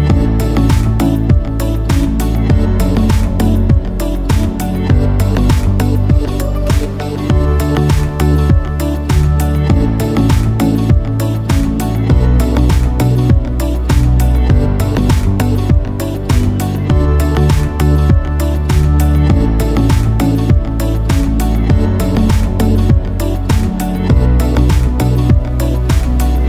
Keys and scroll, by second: 0.7 ctrl+i, 1.9 ctrl+KP_0, 10.0 Return, 16.7-18.0 typing, 19.2 [, 24.6 ctrl+alt+shift+e, 25.5 a.